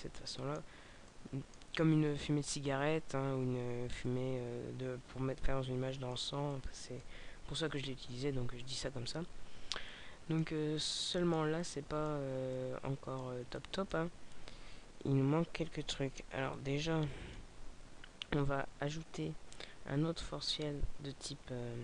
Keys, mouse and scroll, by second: 3.9 middle click, 6.5 middle click, 9.8-13.7 middle click, 16.4 click.